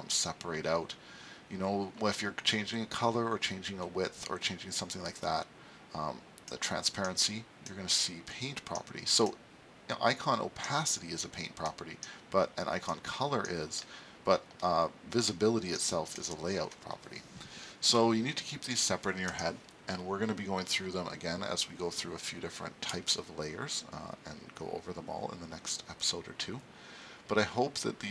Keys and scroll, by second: 19.3 super+s.